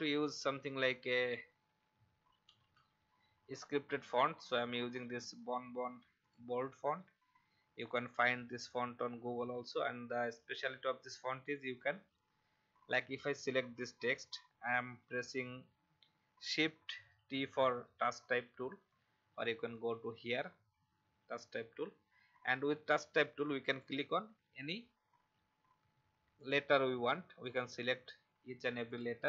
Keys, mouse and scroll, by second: 1.0 click, 2.2-3.2 typing, 6.2 click, 8.1 shift+t, 13.1 click, 15.0 v, 15.3 click, 17.1 shift+t, 19.7-29.2 drag.